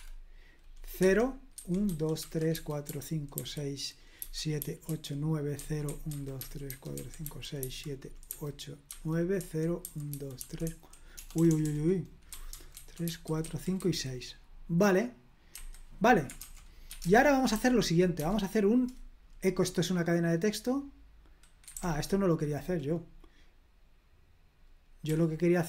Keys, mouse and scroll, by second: 0.0-14.2 typing, 15.5 Escape, 16.6-18.6 typing, 21.6 Escape, 21.7 k, 25.0 d.